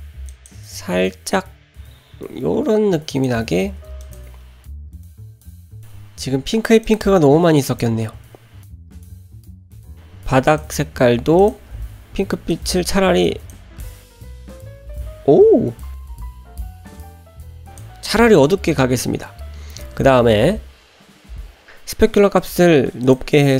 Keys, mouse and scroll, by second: 4.0 click, 4.7 middle click, 5.3 click, 5.3 middle click, 5.3 scroll down 1, 5.8 scroll up 1, 6.8 click, 7.7 click, 9.4 click, 9.7 click, 10.5 click, 11.4 click, 22.4-23.1 drag.